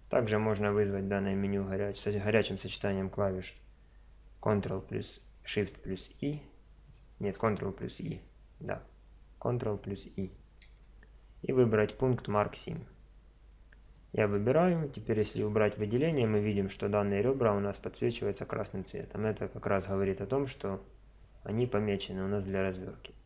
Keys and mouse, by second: 5.9 shift+e, 7.9 ctrl+e, 14.0 ctrl+e, 15.2 a, 16.4-18.5 middle drag.